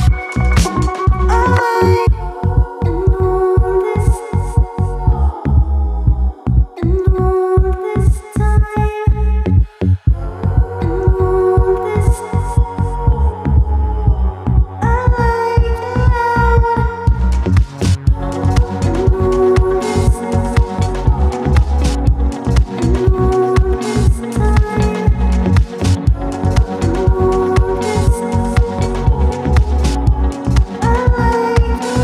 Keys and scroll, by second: 0.8 g, 13.4 space, 15.9 Escape, 16.5 g, 20.1 space, 20.6 F3, 20.9 Escape, 22.8 space, 24.4 ctrl+z, 25.6 space, 25.9 Escape, 31.4 space, 31.9 F2.